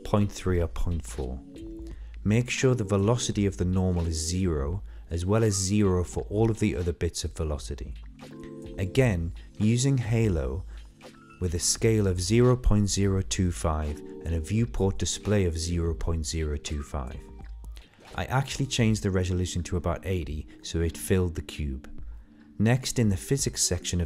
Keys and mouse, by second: 2.4 middle click, 4.1-5.5 drag, 6.5-7.7 drag, 12.8-14.7 drag, 16.6-18.4 drag, 19.1 click, 20.9-23.6 middle drag.